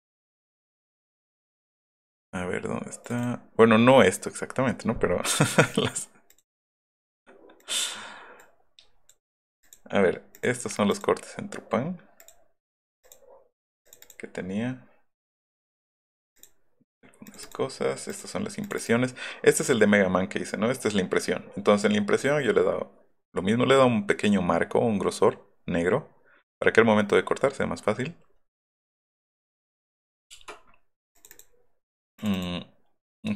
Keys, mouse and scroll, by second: 0.7 click, 3.0 click, 3.2 click, 6.3 middle click, 6.3 scroll up 2, 6.5 middle click, 7.6 middle click, 7.6 scroll up 1, 7.8 click, 8.4 click, 9.7 click, 10.4 click, 10.9 click, 12.2 click, 13.0 click, 13.9 click, 14.1 click, 16.4 click, 17.3 click, 17.4 click, 18.1 click, 18.6 click, 18.8 click, 29.7 click, 30.3 BackSpace, 31.2 click, 31.3 click, 32.2 click, 32.3 click.